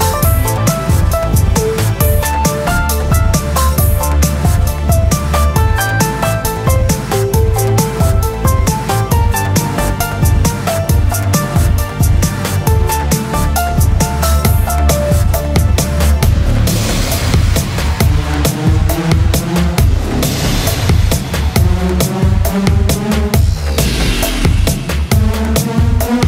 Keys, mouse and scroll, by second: 0.2 a, 0.8 Tab, 1.9 alt+c, 4.3 Tab, 7.3 a, 9.5 e, 13.5-16.0 middle drag, 16.0 click, 19.2-21.1 middle drag, 21.1 Tab, 23.0-25.6 drag.